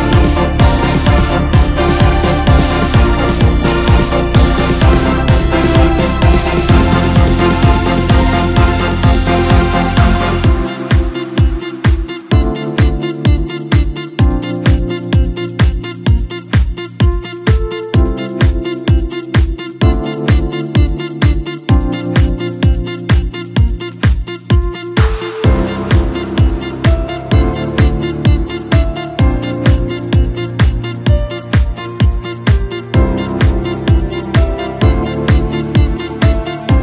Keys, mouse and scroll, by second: 0.9 drag, 2.1 click, 2.7 click, 4.1 middle click, 5.0-5.6 scroll down 2, 5.6-6.9 middle drag, 6.9-9.8 drag, 11.1-12.4 drag, 12.4-13.0 scroll up 1, 13.2 click, 13.4 click, 14.7-17.8 drag, 18.7-21.3 drag, 21.9 click, 25.2-25.7 drag, 26.3-27.3 drag, 31.2-34.3 drag, 35.4 click.